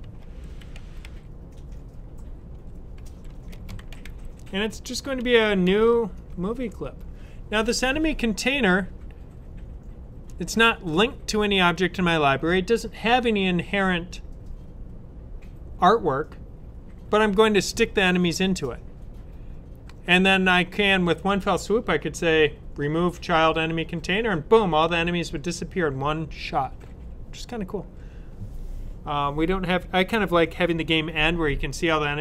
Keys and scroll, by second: 0.0-6.5 typing.